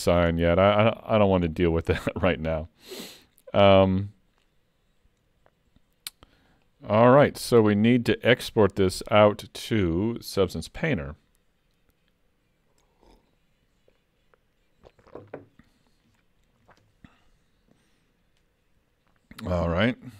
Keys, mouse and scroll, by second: 0.4 shift+middle click, 6.5 click.